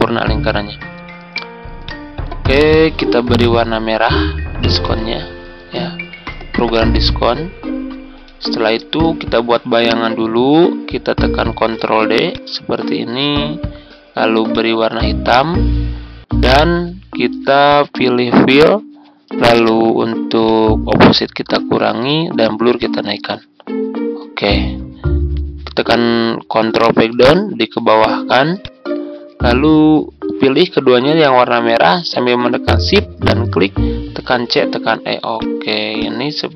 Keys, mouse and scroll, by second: 4.8 ctrl+click, 6.0-8.2 drag, 9.1-9.5 ctrl+scroll up 1, 11.7 ctrl+d, 12.2-24.2 drag, 26.2 click, 27.0 ctrl+Page_Down, 28.5-30.8 drag, 32.8 shift+click, 34.3-34.6 typing, 35.3 click.